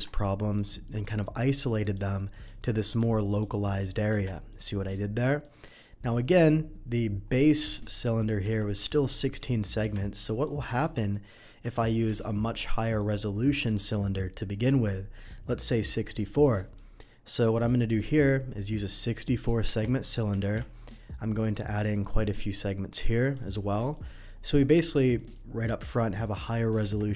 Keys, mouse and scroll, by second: 0.5 click, 0.8 middle click, 1.8 click, 2.3 click, 2.9 click, 3.3 click, 3.7 click, 4.1 Tab, 4.5 middle click, 5.2 middle drag, 7.4 middle click, 8.4 Tab, 10.2 middle click, 10.8 Delete, 11.7 shift+a, 12.9 click, 14.7 middle click, 16.4 middle click, 19.7 Tab, 20.4 ctrl+r, 20.6-21.7 scroll up 2, 23.2 click, 23.4 right click, 23.9 middle click, 25.1 middle click, 26.8 Tab.